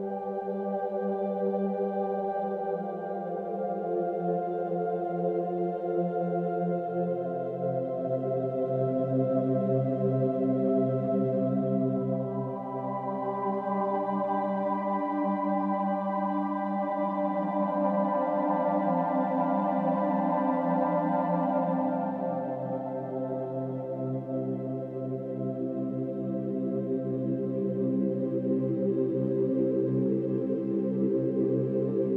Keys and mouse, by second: 0.1 space, 1.2 space, 1.3 click, 1.6 space, 2.9 space, 3.2 click, 3.4 space, 4.6 space, 4.7 click, 6.1 click, 6.1 space, 6.4 space, 7.6 space, 7.7 click, 8.1 space, 9.5 space, 9.8 click, 10.1 space, 11.3 space, 11.6 click, 13.2 space, 13.4 click, 15.3 click, 15.3 space, 17.0 space, 17.3 click, 17.7 space, 19.3 space, 19.5 click, 20.0 space, 21.7 space, 22.0 click, 22.2 space, 23.6 space, 23.8 click, 25.6 click, 25.9 space, 27.4 click, 27.4 space, 27.6 space, 29.2 space, 29.5 click, 29.8 space, 31.3 space, 31.5 click, 31.7 space.